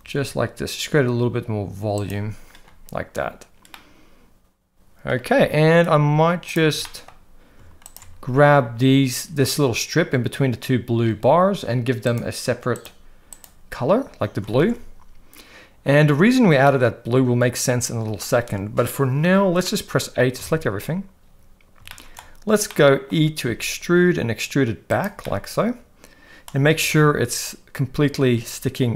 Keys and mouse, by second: 0.0 g, 3.8-5.0 middle drag, 6.8 shift+middle click, 12.0 click, 12.7 drag, 13.4 click, 14.6 alt+a, 16.6-18.1 middle drag, 19.6 middle click, 20.3 a, 21.9 shift+middle click, 22.7 middle click, 23.4 e, 25.2-26.5 middle drag, 26.7 g.